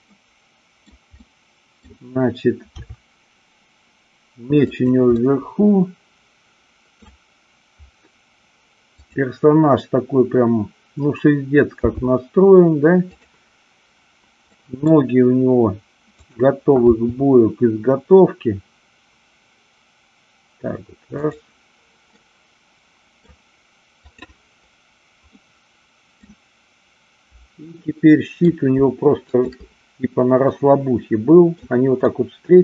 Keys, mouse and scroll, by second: 0.7 middle click, 1.3-1.8 middle drag, 2.7 r, 4.8 click, 5.1-7.0 middle drag, 8.9-10.3 drag, 11.9 g, 14.5 middle click, 17.5 g, 21.1 click, 22.1-23.1 middle drag, 24.0 click, 25.3-26.3 middle drag, 27.7-28.4 middle drag, 29.1-29.8 shift+drag, 30.4-31.5 middle drag, 32.0 middle click.